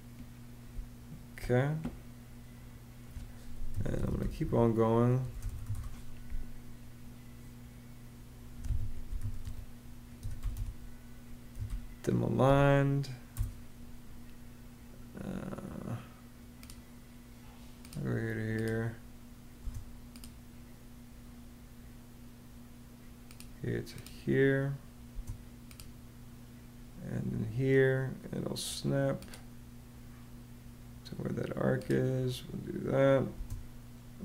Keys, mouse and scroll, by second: 0.5 space, 3.3-5.9 typing, 8.4 Escape, 8.7-12.3 typing, 13.1 Return, 19.4 space, 24.9 space, 33.1 space.